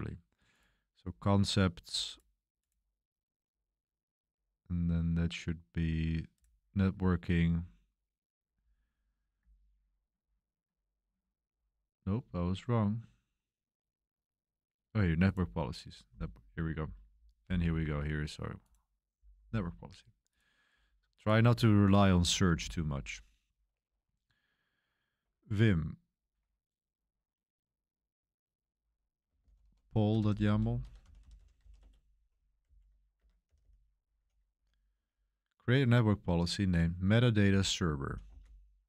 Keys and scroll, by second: 21.9-23.0 typing, 29.0-34.9 typing, 33.2 Escape, 37.1-38.8 typing.